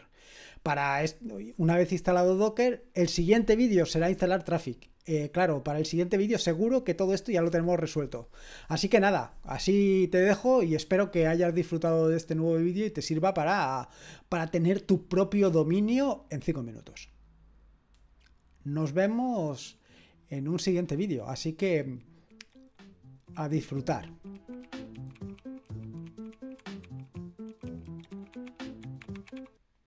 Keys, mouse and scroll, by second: 13.1-15.1 drag, 19.1 click, 29.8 click.